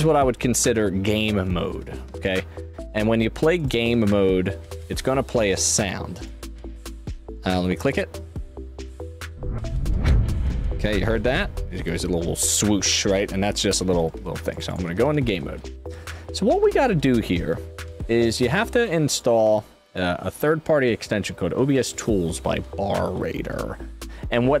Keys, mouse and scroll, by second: 3.5 click, 6.1 click, 14.5 click, 14.6 click, 16.7 click, 19.1 click.